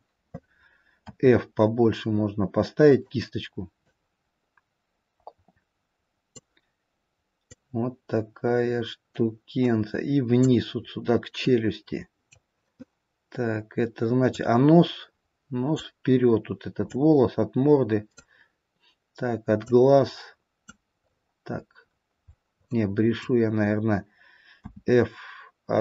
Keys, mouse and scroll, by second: 1.3 f, 4.3 click, 7.9 click, 11.6 middle click, 14.7 click, 17.3 click, 21.3-22.1 scroll up 2, 22.1-22.5 scroll down 1, 22.5 scroll down 3, 24.4 middle click, 24.6 f.